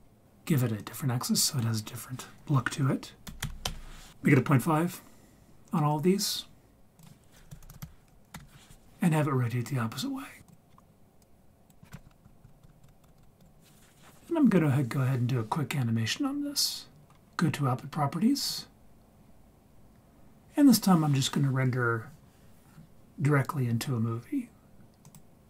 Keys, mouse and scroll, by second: 0.3-0.8 scroll up 5, 0.8-3.7 drag, 7.0-8.3 drag, 10.5 click, 11.2 click, 12.1 Left, 12.2 Left, 12.4 Left, 12.6 Left, 12.8 Left, 13.0 Left, 13.2 Left, 13.4 Left, 18.5 click, 25.1-25.4 drag.